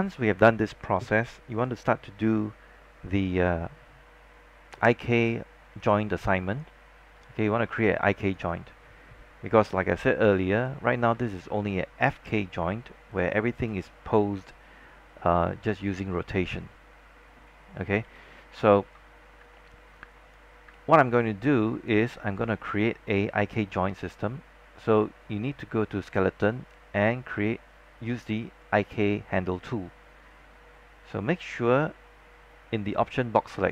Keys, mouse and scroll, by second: 4.9 click, 10.2 scroll down 1, 10.8 alt+click, 11.0 scroll up 1, 11.5 alt+middle click, 13.2 click, 15.4 e, 16.7 click, 18.1 z, 18.5 scroll down 1, 19.0 alt+middle click, 19.2 scroll up 1, 19.7 alt+middle click, 20.2 alt+click, 20.8 alt+middle click, 21.2 alt+click, 22.2 scroll down 1, 22.4 alt+middle click, 26.1 click.